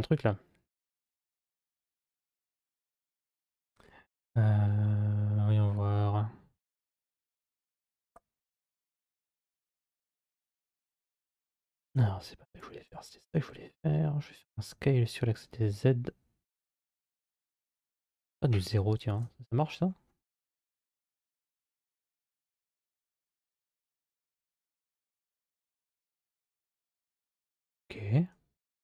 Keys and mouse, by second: 9.5 b, 11.8 2, 12.4 click, 14.2 s, 20.7 click, 22.1 s, 27.5-28.8 drag.